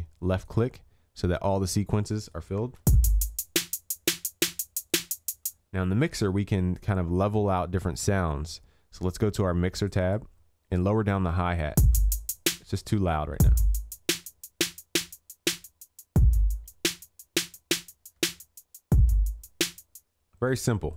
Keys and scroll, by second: 2.6 ctrl+s, 18.2 ctrl+s.